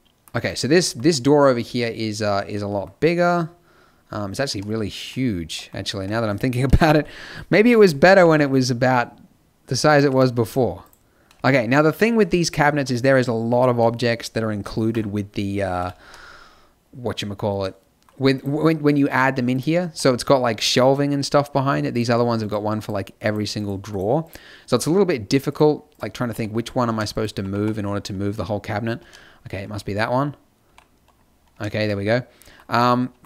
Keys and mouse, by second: 4.5 z, 5.9 Tab, 6.6 KP_7, 7.6 KP_5, 8.2 g, 10.1 Tab, 15.8 KP_5, 16.0 z, 18.3-19.4 right drag, 19.8 z, 26.3 g, 27.5 g, 29.0-31.5 middle drag, 30.6 g, 32.7 Tab.